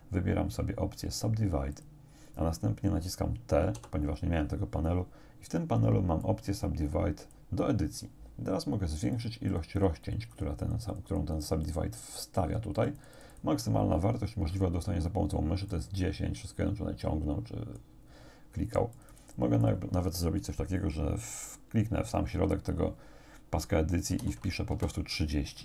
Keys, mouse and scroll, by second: 1.8 click, 3.8 t, 6.3-7.5 drag, 9.2 click, 9.7-12.0 drag, 12.8 click, 15.7-18.0 drag, 18.7 click, 19.7 click, 24.1 3, 24.7 Return.